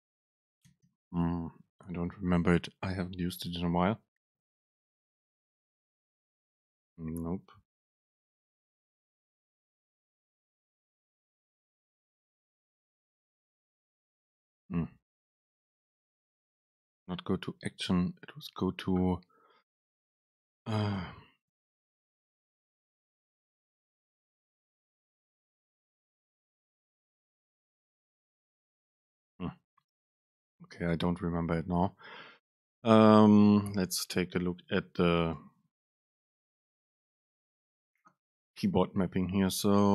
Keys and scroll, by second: 34.3 Down.